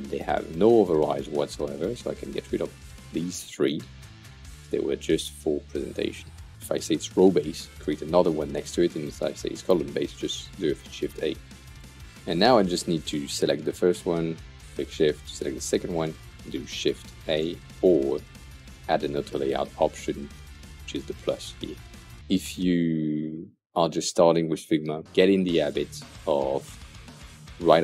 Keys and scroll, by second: 3.7 Delete.